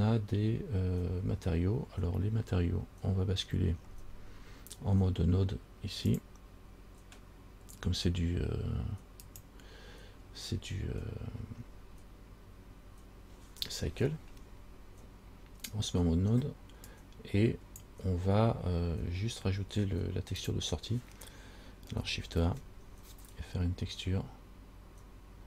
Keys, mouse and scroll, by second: 6.3 click, 17.1 click, 20.6 click, 22.6 shift+a.